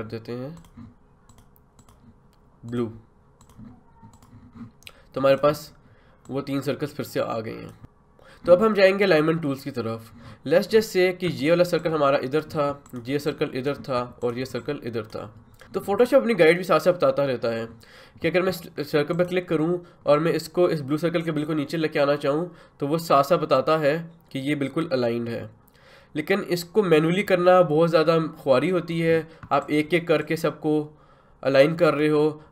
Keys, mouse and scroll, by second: 15.6 ctrl+z, 19.1-32.5 ctrl+drag.